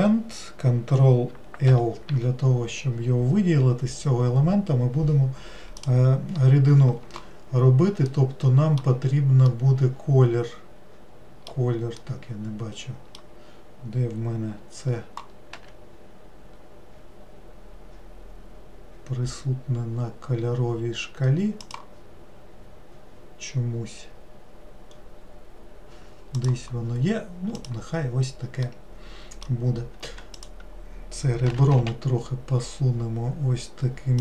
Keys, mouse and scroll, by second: 8.1-15.1 middle drag, 23.1 scroll down 2, 25.2-26.4 scroll up 2, 26.4 click, 27.6 click, 28.7-30.1 middle drag, 30.1 2, 30.4 click.